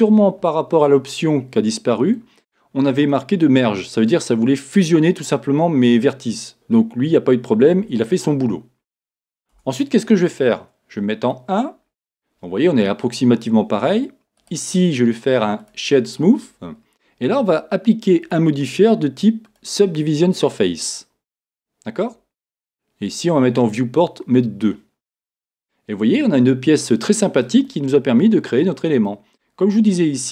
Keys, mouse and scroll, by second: 0.0 click, 0.9-11.0 middle drag, 2.4-3.1 scroll down 2, 9.6 Tab, 11.0 KP_1, 11.6-15.7 middle drag, 15.7-22.2 right drag, 22.2-26.2 drag, 25.4 middle click, 26.2-30.3 middle drag, 29.7 scroll up 2.